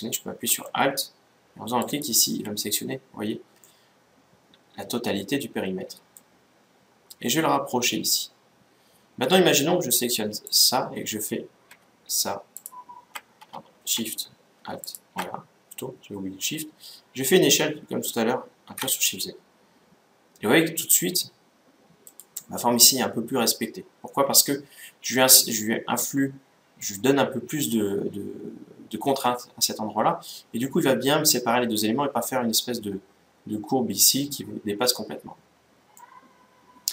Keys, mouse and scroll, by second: 1.5-3.3 right drag, 3.3-5.3 middle drag, 7.1-8.8 drag, 10.2-12.1 right drag, 12.3-14.2 right drag, 14.5-16.5 right drag, 17.2 s, 24.0-26.0 middle drag, 29.7-31.0 scroll down 1, 31.0 middle click, 35.7-36.9 middle drag.